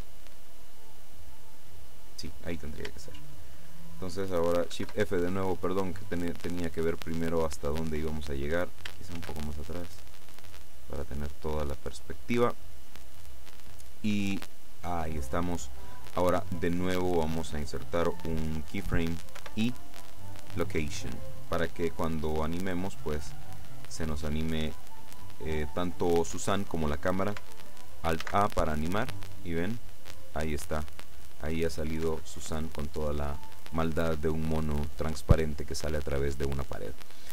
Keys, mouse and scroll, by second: 4.8 shift+f, 5.0-5.4 shift+scroll down 3, 5.6 click, 9.2 shift+f, 9.4-9.8 shift+scroll down 3, 10.2 click, 19.4 i, 20.5 click, 23.4-26.0 drag, 28.3 alt+a, 32.2 Escape, 34.1-36.0 middle drag.